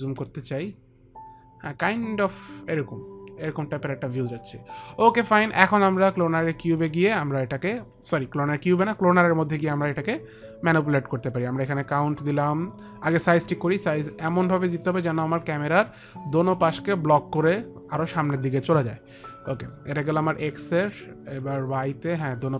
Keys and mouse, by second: 0.2 click, 6.2 click, 9.0 click, 14.0 click, 20.8 click.